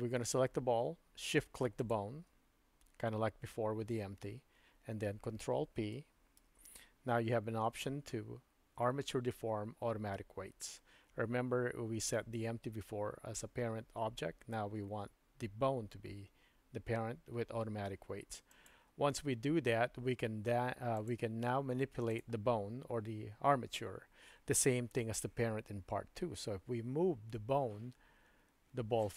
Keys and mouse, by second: 6.3 ctrl+p, 20.9 click, 27.7 g.